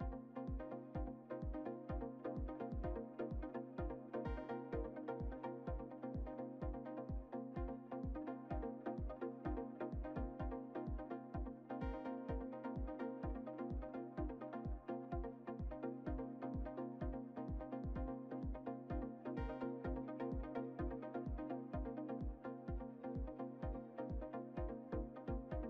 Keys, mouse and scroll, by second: 0.9 alt+d, 3.3 r, 6.0-7.6 shift+middle drag, 7.6-8.2 scroll up 2, 8.2 scroll up 2, 8.3 click, 11.4-14.1 shift+middle drag, 12.7 scroll up 1, 14.1-16.3 drag, 16.3-18.5 shift+middle drag, 18.5 click, 20.4-22.5 middle drag, 22.5 Tab, 24.2 Tab, 24.2 Tab, 24.6-25.2 drag, 25.2 3.